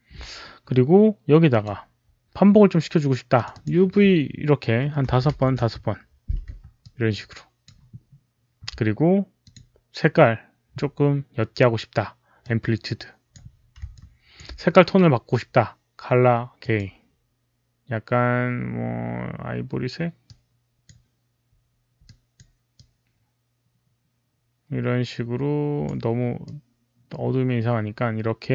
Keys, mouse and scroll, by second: 1.4 click, 3.2 click, 3.4 alt+click, 5.3 Tab, 5.3 KP_5, 6.7-7.5 alt+drag, 6.8 Return, 6.8 Tab, 6.8 KP_5, 9.3 alt+click, 12.3 Return, 12.3 Tab, 12.3 alt+click, 12.3 KP_5, 13.8 alt+click, 16.5 alt+click, 20.1 alt+click, 21.9 alt+click, 22.6-25.7 alt+drag, 26.3-28.5 drag.